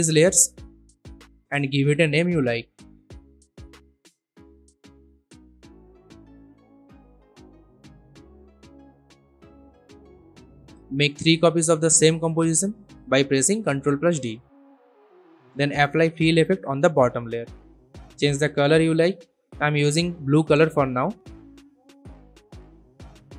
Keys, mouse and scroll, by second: 0.2 right click, 1.2 click, 2.7-7.6 typing, 8.7 click, 11.8 ctrl+d, 13.2 click, 15.1 ctrl+space, 15.7-17.0 typing, 17.1 Return, 19.0-22.2 drag.